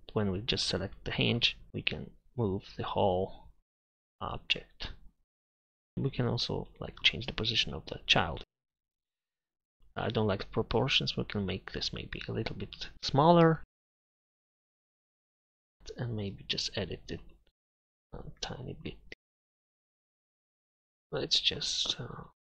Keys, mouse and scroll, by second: 0.6 middle click, 1.7 ctrl+z, 6.4 click, 8.7 ctrl+z, 10.3-12.2 drag, 14.5 s, 14.7 s, 15.7 drag, 20.6 KP_Divide, 20.9 a.